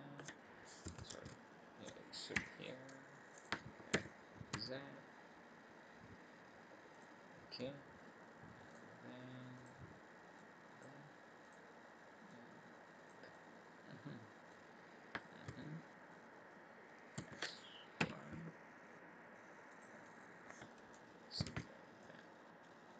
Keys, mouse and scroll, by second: 1.1 ctrl+z, 2.3 e, 3.9 s, 8.6 click, 9.5 click, 10.3 click, 11.4 click, 12.2 click, 13.3 middle click, 15.4 a, 17.1 s, 20.1 middle click, 21.5 alt+a, 22.0 middle click.